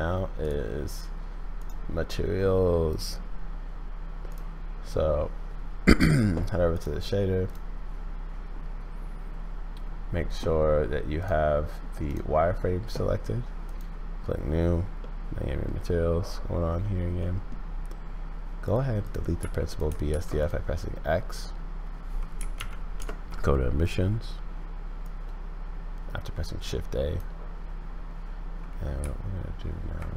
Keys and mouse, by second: 0.4 click, 1.7-2.9 middle drag, 3.9 click, 11.2 click, 13.6 click, 15.1 click, 17.2 click, 19.0 click, 19.4 x, 19.7 click, 20.1 shift+a, 25.0-27.2 drag, 29.0 z.